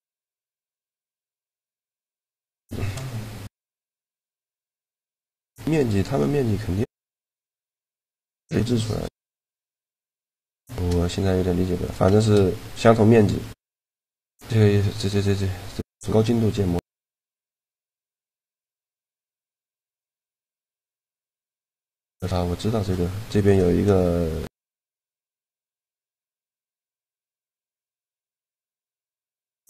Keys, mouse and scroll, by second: 0.4 shift+g, 2.2 shift+g, 4.4 right click, 9.3-12.4 drag, 11.6-13.3 right drag, 12.0 shift+g, 20.4-22.3 drag, 21.8 middle click, 26.8 middle click, 27.2-28.4 drag, 28.4 Tab, 28.6 click, 28.9 right click, 29.1 Tab, 29.4-29.6 drag.